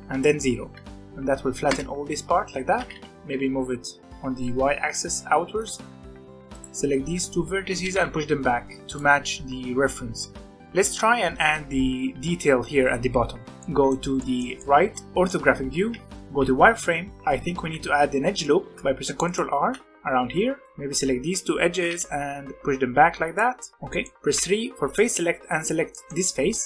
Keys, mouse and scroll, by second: 2.7 g, 6.3 click, 6.5 shift+click, 7.8 g, 10.4-13.1 middle drag, 13.5 scroll down 2, 13.7-15.9 middle drag, 15.9 z, 16.7-17.9 scroll up 6, 17.9 ctrl+r, 18.5 ctrl+r, 20.6 b, 21.7 g, 23.7 middle click, 24.2 3, 24.8 click, 25.8 scroll down 1, 25.8 middle click, 26.4 scroll down 1, 26.6 middle click.